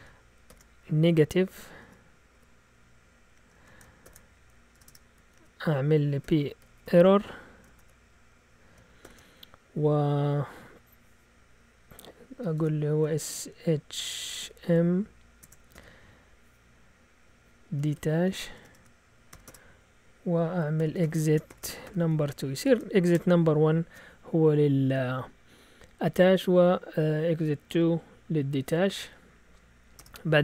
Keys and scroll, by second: 0.4 <, 1.8 Delete, 2.3 0, 3.4 shift+Tab, 4.0-7.8 typing, 9.0 typing, 12.5-13.0 typing, 14.1-16.2 typing, 17.5-19.3 typing, 18.6 shift+Tab, 19.4 Return, 20.5-23.6 typing, 29.5 Down, 29.9 Return.